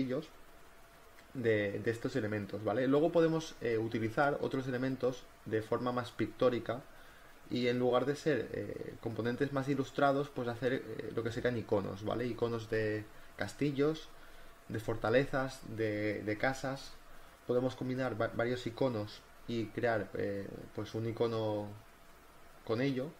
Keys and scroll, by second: 4.0 ctrl+t, 4.3 Return, 4.4 v, 4.7 ctrl+t, 4.9 Return, 9.1 v, 10.4 b, 10.8 ctrl+z, 11.0 ctrl+z, 13.9 ctrl+z, 14.3 ctrl+z, 17.1 ctrl+z, 17.4 ctrl+z, 18.2-21.3 typing, 21.4 ctrl+t, 21.5 Return.